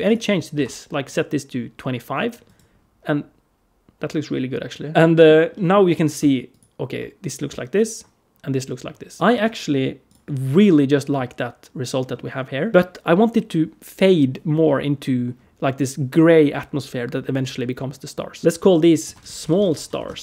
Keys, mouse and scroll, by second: 2.3 right click, 4.9 middle click, 5.4 middle click, 6.3 ctrl+shift+click, 7.6 ctrl+shift+click, 9.2 middle click, 9.9 click, 11.8-12.7 scroll up 2, 12.7 click, 18.3 click, 18.4 F2, 18.4 middle click, 18.4 g, 19.4 l.